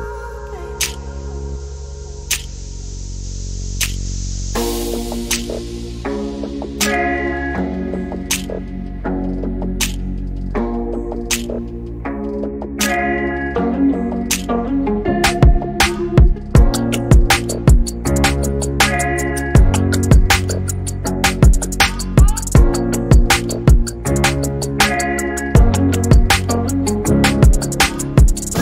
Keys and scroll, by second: 4.8-7.3 typing, 8.5 m, 10.0 m, 11.7-14.7 typing, 16.8-19.2 typing, 21.5-22.1 typing, 24.1 p, 27.7-28.6 typing.